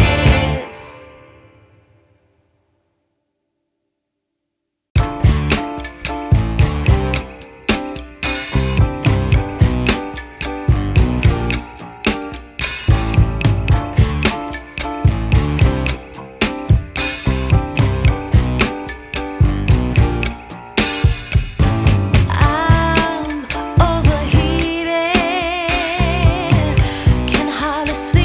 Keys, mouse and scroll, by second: 9.3 scroll up 1, 9.4 scroll down 1, 9.6-10.1 scroll up 1, 10.1-10.6 scroll down 1, 10.6-11.0 scroll up 1, 11.0-11.4 scroll down 2, 11.8-12.2 scroll up 2, 12.2-13.2 scroll down 1, 14.5 click, 17.8 click, 18.0 F10, 20.8 click, 22.8 click, 24.1 scroll up 2, 24.3 scroll down 2, 24.5 scroll up 2, 24.6-24.9 scroll down 1, 24.9-26.5 scroll up 4, 26.5 click.